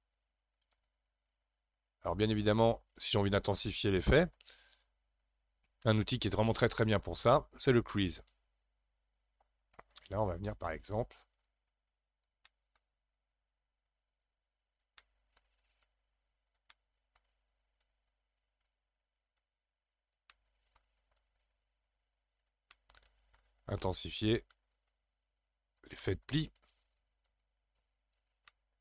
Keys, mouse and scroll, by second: 4.6-5.5 scroll up 1, 5.5-7.1 scroll up 12, 7.1-8.2 scroll up 1, 8.2 click, 8.9-9.9 scroll up 1, 9.9-12.5 drag, 12.5 middle click, 13.3-15.0 drag, 15.0 middle click, 15.8 click, 16.7-17.8 middle drag, 17.8-20.3 drag, 20.3 middle click, 21.1-22.7 drag, 22.7-24.1 middle drag, 24.1-26.0 drag, 26.0-27.3 middle drag, 27.3-28.5 drag, 28.5-28.8 middle drag.